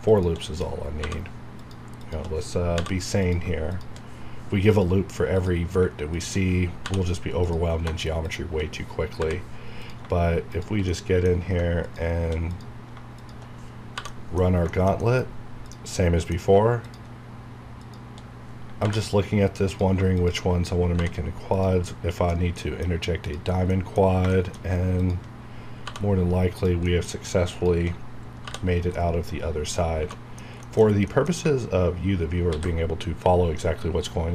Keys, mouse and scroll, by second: 0.0 shift+click, 1.0 j, 1.5 click, 2.0 shift+click, 2.7 j, 3.2 click, 6.7 j, 7.4 click, 7.8 Caps_Lock, 8.2 click, 9.1 j, 9.7 click, 11.0 middle click, 11.8 click, 12.4 click, 13.9 j, 14.0 middle click, 14.6 shift+middle click, 15.2-15.6 scroll up 1, 15.6 click, 15.8 middle click, 16.8 click, 20.9 j, 21.4 click, 21.8 middle click, 23.2 click, 23.7 middle click, 24.3 shift+middle click, 24.9 shift+click, 25.8 j, 26.0-26.5 scroll down 1, 26.5 click, 26.8 middle click, 27.5 shift+click, 28.3 j, 28.5 scroll down 1, 28.9 middle click, 30.1 middle click, 30.3 scroll down 1, 30.6 shift+middle click, 30.9 scroll down 1, 31.0 middle click, 32.4 ctrl+s.